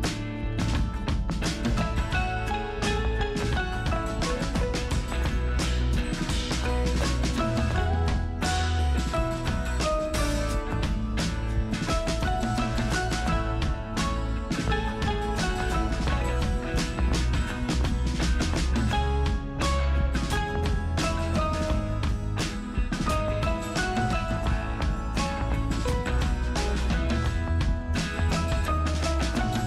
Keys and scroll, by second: 1.5 space, 2.3 space.